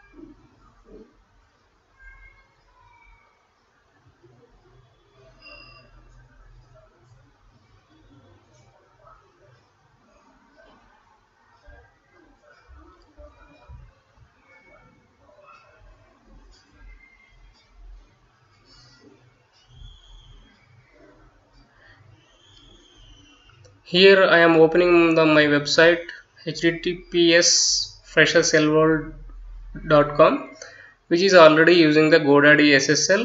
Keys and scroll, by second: 0.0-2.4 typing, 5.1-10.2 typing, 11.1 Delete, 13.3 ., 13.7 Return, 15.7-33.2 typing.